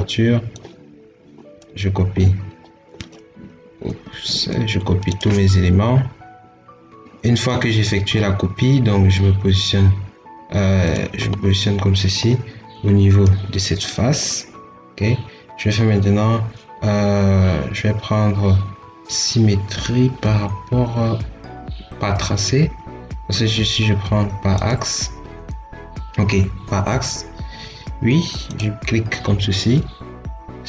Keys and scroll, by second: 3.7 Escape.